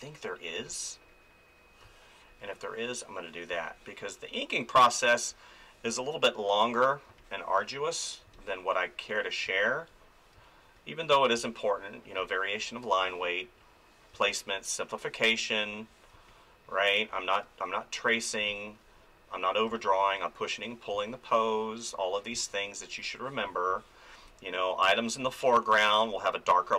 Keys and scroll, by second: 0.6 space, 3.5 space, 7.1 space, 14.1 space, 18.4 space.